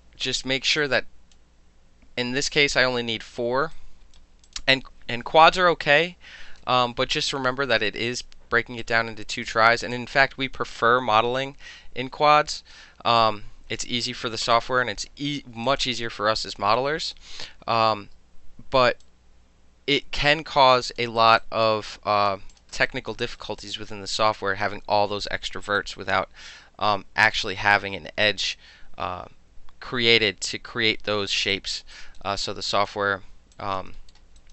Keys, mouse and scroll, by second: 0.8 click, 3.8-4.2 right drag, 4.5 click, 6.6 Delete, 8.8 click, 13.2 click, 15.7 click, 17.1 click, 19.0-20.3 alt+drag, 20.3 alt+middle click, 20.7 alt+click, 21.0 alt+middle click, 21.2 alt+right click, 21.3 alt+middle click, 21.4 alt+click, 21.9 alt+click, 22.3 alt+middle click, 22.5 alt+click, 22.6 alt+middle drag, 22.9 alt+drag, 23.1 alt+middle click, 23.2 alt+right click, 23.4 alt+middle click, 23.6 alt+click, 23.9 alt+middle click, 24.1 alt+click, 24.4-25.8 alt+middle drag, 25.8 alt+click, 26.0 alt+middle click, 31.5 alt+click, 32.0 alt+right click, 32.4-32.9 alt+drag, 33.6 alt+drag, 34.0 alt+middle click, 34.4 alt+right click.